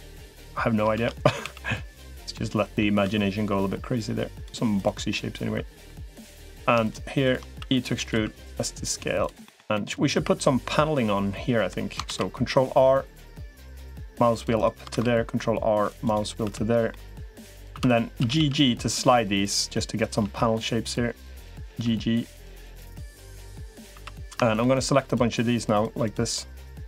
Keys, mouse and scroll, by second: 0.8 shift+d, 1.2 s, 2.1 middle click, 2.8 e, 4.9 middle click, 6.0 click, 6.6 shift+click, 7.0 shift+click, 7.4 e, 8.0 s, 9.2 middle click, 9.5-11.5 middle drag, 11.8 ctrl+r, 14.8 ctrl+r, 16.4 3, 16.7 middle click, 17.6 2, 18.0 g, 19.8 click, 20.0 g, 21.4 g, 23.8 3, 24.0 click, 25.8 click, 26.4 click.